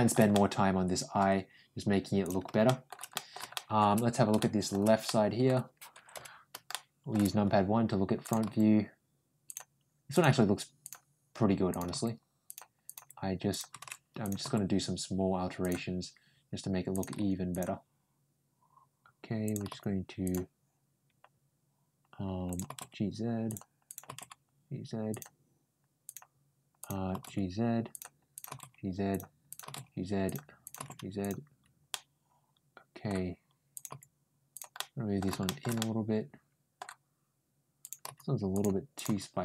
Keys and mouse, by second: 0.1 middle click, 2.1 click, 2.5 shift+middle click, 2.9 right click, 3.4 shift+middle click, 4.2 shift+middle click, 4.9 middle click, 6.5 middle click, 8.1 click, 8.3 g, 9.9 click, 10.1 g, 11.5 click, 11.7 g, 12.7 click, 13.0 g, 14.1 click, 14.2 ctrl+g, 16.8 click, 17.0 ctrl+g, 19.3 click, 19.5 g, 22.3 click, 22.5 g, 23.7 click, 23.9 g, 25.9 click, 26.6 click, 26.9 g, 28.2 click, 28.3 g, 29.3 click, 29.5 g, 30.5 click, 30.6 g, 31.7-32.9 middle drag, 33.6 click, 33.7 g, 34.6 middle click, 35.3 middle click, 35.6 middle click, 37.6 click, 37.9 g, 38.8 click, 38.9 g.